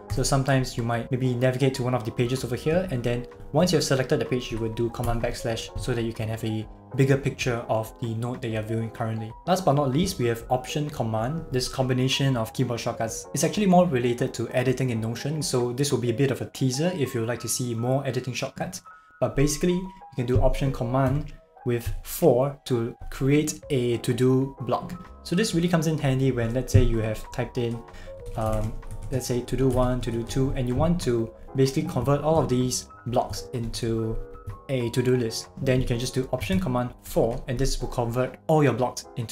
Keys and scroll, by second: 5.1 super+\, 21.1 Return, 26.1 BackSpace, 28.3-30.3 typing, 32.0 shift+Page_Up, 32.4 shift+Up, 37.1 alt+super+4.